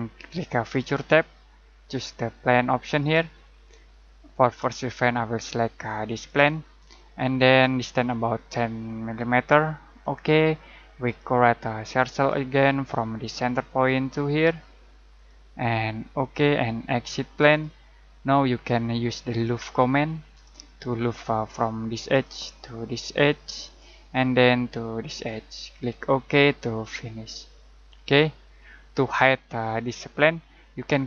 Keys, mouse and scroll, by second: 0.7 click, 6.2 click, 10.0 click, 13.7 click, 22.0 click, 25.1 click.